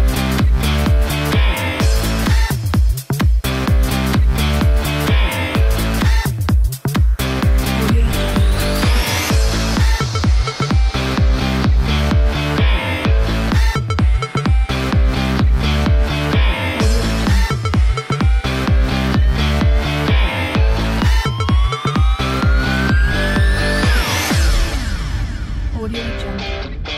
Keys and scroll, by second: 1.1-5.2 typing, 7.6-15.6 typing.